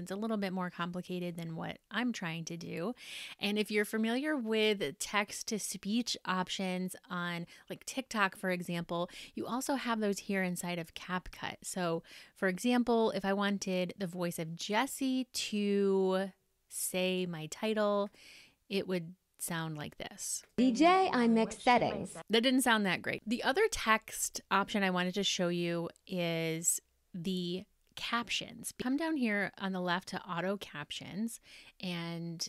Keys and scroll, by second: 20.7 space.